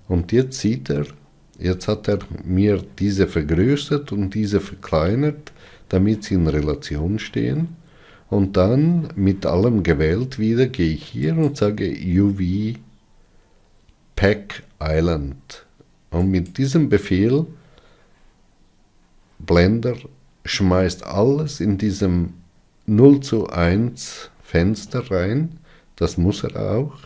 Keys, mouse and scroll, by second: 0.1 click.